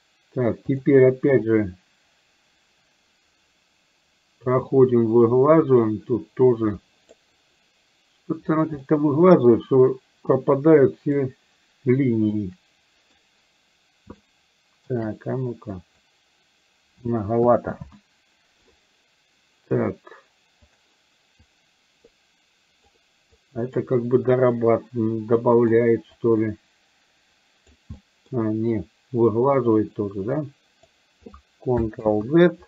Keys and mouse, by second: 0.9 click, 1.5-7.1 drag, 8.9 middle click, 10.4 click, 12.4 ctrl+middle click, 14.2 shift+middle click, 15.9 click, 17.9 ctrl+z, 20.7 click, 21.5-23.0 drag, 23.5 click, 25.5 middle click, 26.1-27.7 drag, 28.0 middle click, 30.5 click, 32.2 ctrl+z.